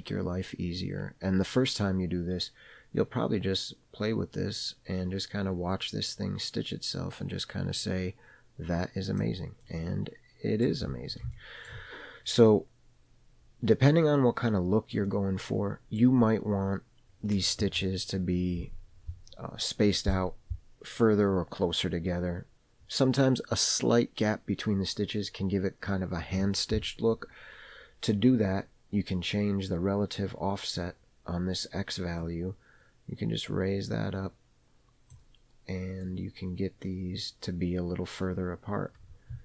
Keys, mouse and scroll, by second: 9.8-10.9 middle drag, 11.0 scroll up 1, 11.5 shift+middle click, 12.0-12.7 scroll down 2, 12.7 scroll down 1, 12.7-13.6 scroll up 1, 13.6-14.5 scroll up 1, 14.5-15.2 scroll down 1, 15.3 middle click, 16.4-18.5 scroll up 1, 32.4-35.4 drag, 36.2-39.4 drag.